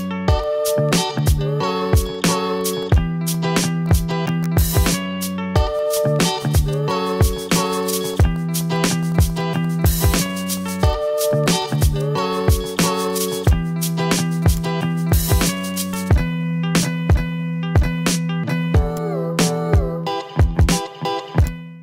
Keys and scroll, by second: 0.5 ctrl+z, 3.5 v, 6.2 ctrl+z, 7.1 v, 8.0 a, 9.2 v, 9.5 ctrl+z, 10.6 a, 10.8 ctrl+z, 15.6 ctrl+z, 16.5 ctrl+z, 17.8 v.